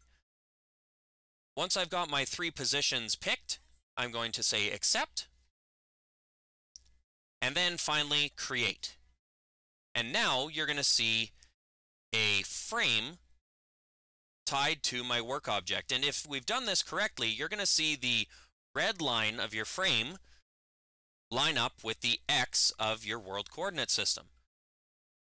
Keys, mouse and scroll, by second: 4.7 click, 8.4 click.